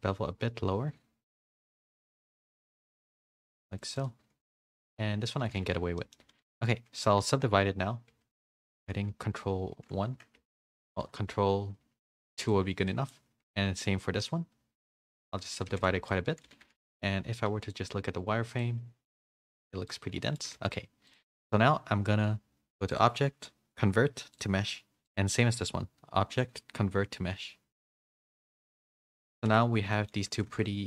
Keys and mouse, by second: 5.4 a, 5.6 a, 6.0 middle click, 6.2 a, 6.4 a, 8.2 ctrl+1, 9.0 ctrl+2, 10.3 ctrl+2, 11.0 ctrl+3, 12.0 ctrl+2, 12.9 middle click, 13.9 ctrl+2, 15.2 ctrl+3, 15.7 a, 15.9 a, 16.0-16.4 middle drag, 16.4 a, 16.6 a, 16.7 middle click, 17.6-20.2 drag, 20.2 middle click, 20.4 a, 20.5 a, 23.0-24.5 drag, 25.0 click, 26.4-28.3 drag, 28.9 a, 29.2 a, 29.3 click, 29.5 Tab, 29.9 middle drag, 30.2 Tab, 30.3 click, 30.6 Tab.